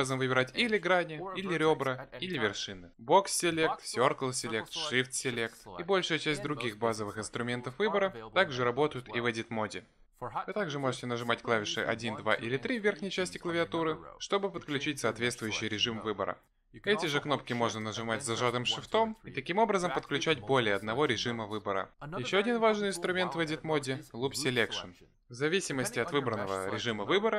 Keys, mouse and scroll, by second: 0.6 click, 1.1 click, 1.7 click, 2.9 click, 4.1 b, 5.2 c, 11.8 1, 12.8 2, 13.7 3, 17.8 shift+1, 18.5 shift+2, 19.9 shift+3, 21.3 shift+3.